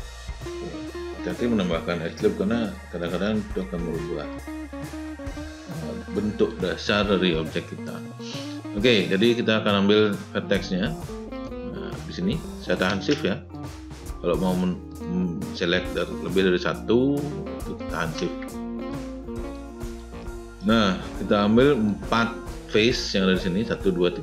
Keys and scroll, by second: 0.1 space.